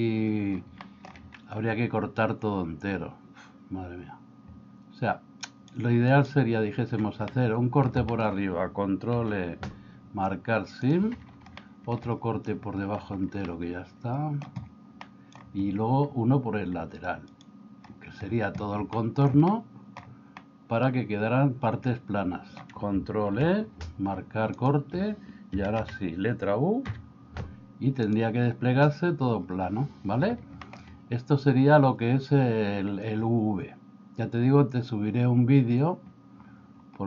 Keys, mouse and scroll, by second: 0.9 middle click, 7.3 middle click, 8.1 middle click, 9.2 ctrl+e, 11.6 shift+middle click, 13.5 middle click, 15.2 middle click, 18.9 shift+middle click, 19.6 middle click, 20.4-22.7 middle drag, 23.3 ctrl+e, 25.6 a, 26.4 a, 27.0 u, 30.6 middle click.